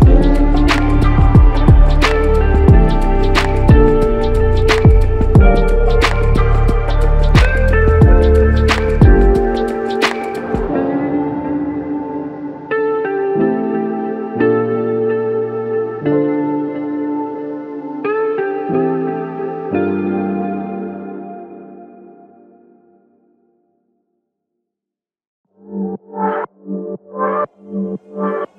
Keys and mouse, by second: 0.4 double click, 2.7 alt+click, 4.3 double click, 8.1 alt+click, 9.5 double click, 9.9 alt+click, 11.6 alt+click, 14.1 double click, 16.2 alt+click, 17.7 f, 19.4 double click, 26.7 shift+click.